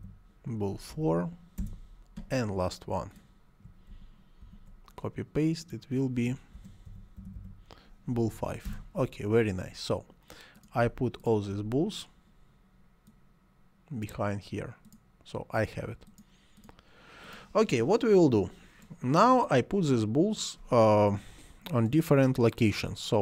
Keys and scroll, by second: 0.0-0.9 typing, 1.6 Return, 3.9 ctrl+c, 4.5 ctrl+v, 6.3-8.3 typing, 8.6 Return.